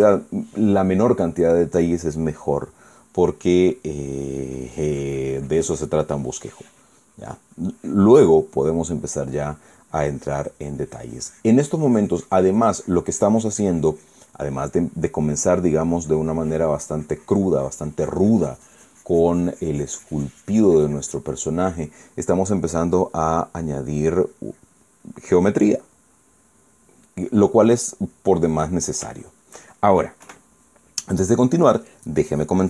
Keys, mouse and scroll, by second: 4.9-9.2 drag, 10.6-22.4 drag, 24.9 click, 25.7 click, 26.9-28.1 middle drag, 28.3-29.7 middle drag, 29.9 shift+middle click, 30.9 KP_1.